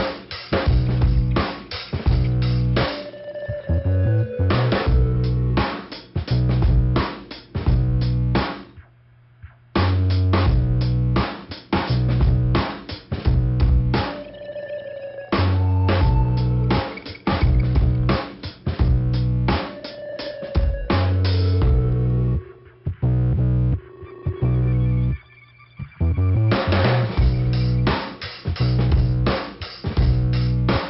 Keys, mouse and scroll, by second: 0.2 click, 1.0 click, 2.1 click, 2.1 click, 3.7 click, 3.8 click, 4.7 click, 4.8 click, 5.8 click, 6.0 click, 7.1-7.5 scroll down 1, 7.1 ,, 8.3 click, 10.3 click, 10.4 click, 12.5 click, 13.3 click, 13.4 click, 14.0 click, 14.0 click, 15.0 click, 15.0 click, 15.7 click, 15.8 click, 16.9 click, 17.0 click, 17.8 click, 17.9 click, 18.9 click, 18.9 click, 19.5 click, 19.6 click, 20.2 click, 20.3 click, 20.9 click, 21.0 click, 21.6 right click, 22.7 click, 23.3 click, 24.1 click, 25.1 click, 25.2 click, 25.9 click, 26.1 click, 27.3 click, 29.1 click.